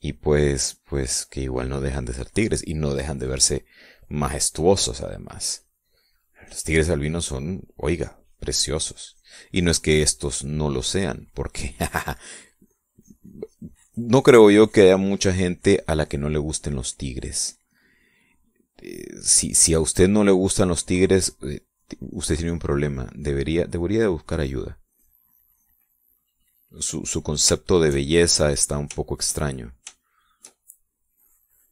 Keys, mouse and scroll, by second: 3.8-7.4 drag, 7.6 middle click, 8.5-11.0 drag, 11.2-13.0 drag, 13.2-17.8 drag, 18.5-19.2 middle drag, 19.7-26.8 drag, 26.9 click, 27.6 click, 28.2-29.4 shift+middle drag, 30.6 middle click, 31.4 shift+middle click.